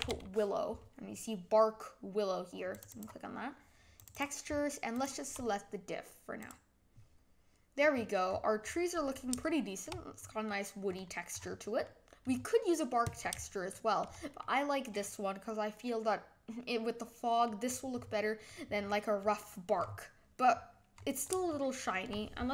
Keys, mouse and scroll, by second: 7.8 middle click, 7.9-9.4 scroll up 13, 9.4 shift+middle click, 10.1 scroll down 3, 10.4-10.8 middle drag, 10.8-11.8 scroll down 10, 11.8 middle click, 12.2-13.1 scroll up 5, 13.7-17.4 shift+middle drag, 17.6 scroll down 3, 17.9-18.4 scroll up 7, 18.4 middle click, 18.7-19.2 scroll down 3, 19.2 middle click, 19.8-21.5 scroll up 17, 21.5-22.0 shift+middle drag, 22.0-22.5 scroll down 1.